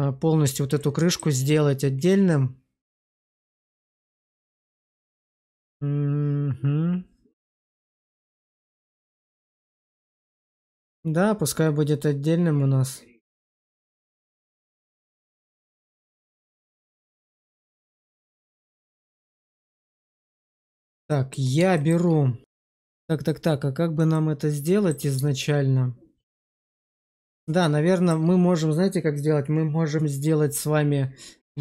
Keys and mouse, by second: 19.8 shift+middle click, 20.2 alt+middle click, 21.0 shift+middle click, 21.7 shift+middle click, 24.0 middle click, 25.3-26.9 shift+middle drag, 27.5 shift+middle click.